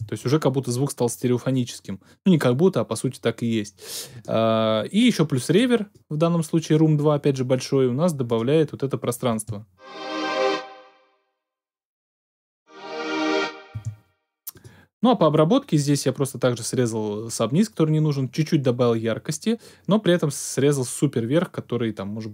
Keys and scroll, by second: 9.3 space, 13.7 space.